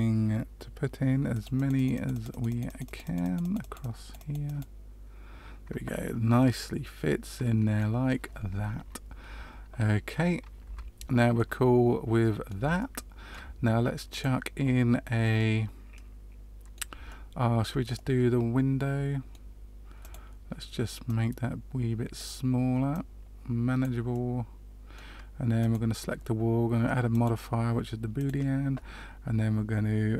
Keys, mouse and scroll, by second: 1.3 click, 1.5 click, 1.7 click, 1.9-2.4 click, 2.1 click, 2.2 click, 2.6 click, 2.8 click, 3.0 click, 3.2 click, 3.4 click, 3.5 click, 3.7 click, 4.2 click, 4.4 click, 6.3 middle click, 9.2 Tab, 10.6 Tab, 11.3 middle click, 12.7 shift+middle click, 14.0 click, 15.3 middle click, 17.0 shift+middle click, 17.9 middle click, 19.9 click, 21.2 click, 22.9 click, 24.1 middle click, 25.5 click, 27.0 click.